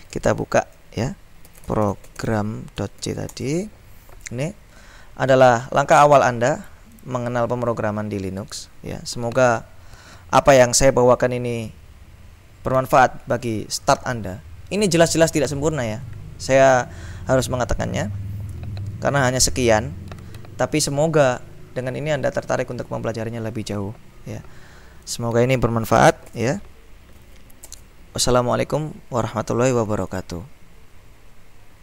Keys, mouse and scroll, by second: 0.0-3.6 typing, 5.5-7.6 drag, 25.1 click, 26.4 shift+;, 27.0 shift+-, 27.2 q, 27.8 Return, 30.2 click.